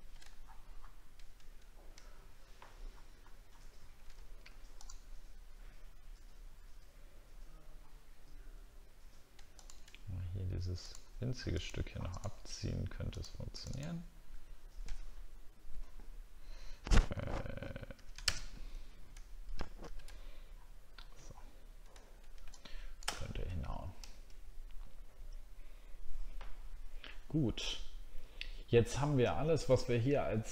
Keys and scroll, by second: 0.4 alt+scroll down 1, 2.1 alt+scroll down 1, 2.5-2.9 alt+scroll up 2, 3.4 alt+scroll up 1.